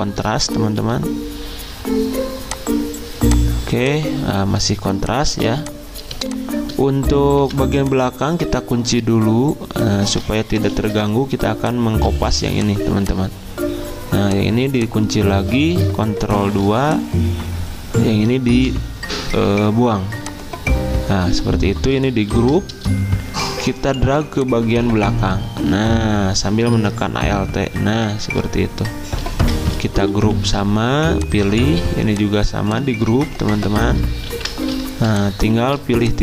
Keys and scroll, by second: 0.8 d, 5.3 z, 7.4 v, 10.7 ctrl+2, 12.2 ctrl+z, 16.3 ctrl+2, 18.5 Delete, 22.3 ctrl+g, 30.1 ctrl+g, 34.3 ctrl+g.